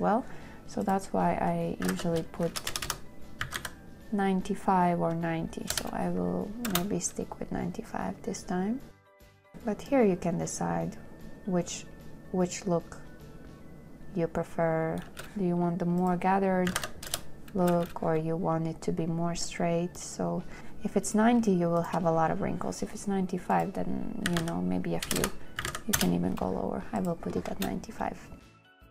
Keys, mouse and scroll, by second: 2.0-3.9 typing, 6.0 Return, 7.0 space, 15.4 space, 17.0 KP_9, 17.2 KP_0, 17.4 Return, 18.1 space, 20.6 space, 22.1 shift+click, 24.2 shift+click, 24.5-26.0 typing, 26.3 Return, 27.8 space.